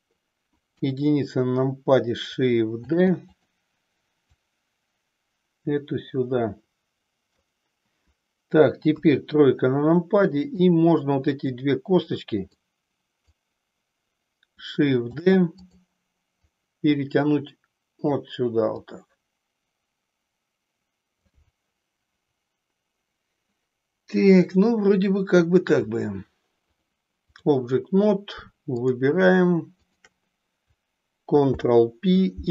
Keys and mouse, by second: 0.7 KP_1, 2.7 shift+d, 4.3-7.4 drag, 8.8 KP_3, 10.4-11.6 drag, 12.6 click, 15.2 shift+d, 15.7 click, 16.5-18.2 drag, 18.8-21.3 drag, 26.8 click, 28.8 click, 29.9 shift+click, 31.4 ctrl+p.